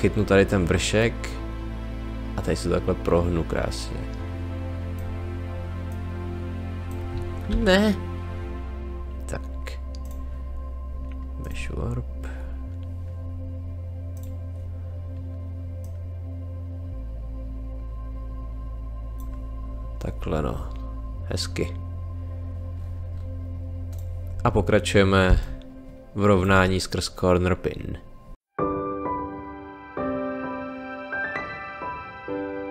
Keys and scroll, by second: 7.5 ctrl+z, 25.2 space, 28.5-32.7 typing.